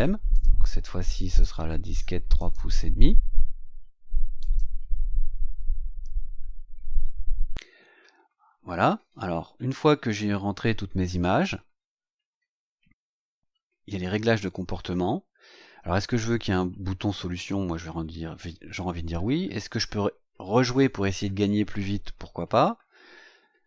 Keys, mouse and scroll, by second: 0.3 click, 2.3 click, 4.3 click, 8.9-9.2 scroll up 2, 11.1-11.8 scroll down 4, 12.9 click, 14.8-15.1 scroll down 2.